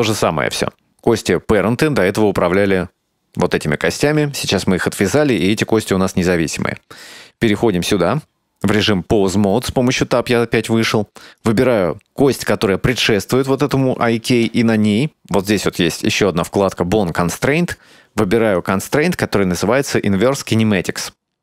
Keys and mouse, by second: 1.1 right click, 2.6 right click, 5.4 right click, 6.5 Tab, 11.3 right click, 17.7 click, 18.7-21.0 drag.